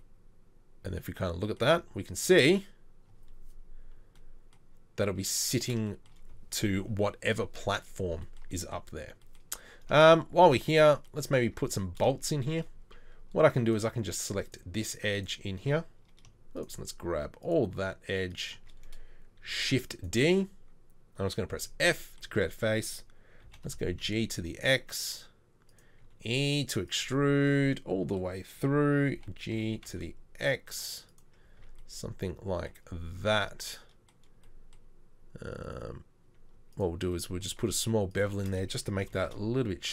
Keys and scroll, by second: 11.5 Tab, 19.5 shift+d, 21.5 f, 23.5 g, 26.0 e, 29.2 g, 31.6 Tab, 33.7 Tab, 39.2 ctrl+b.